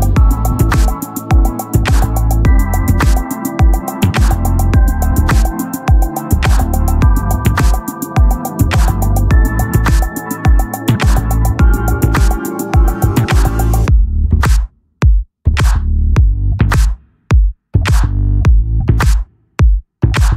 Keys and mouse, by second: 4.7 click, 6.7 [, 7.0 [, 7.2 [, 8.4 click, 12.6 click.